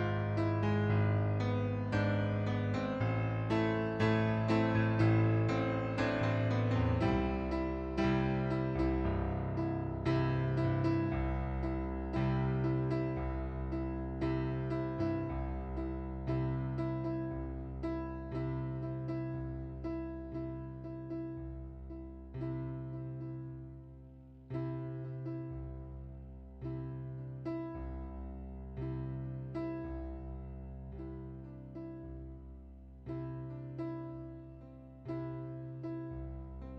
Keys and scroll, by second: 32.0 ctrl+d, 34.7 ctrl+d, 35.1 ctrl+d.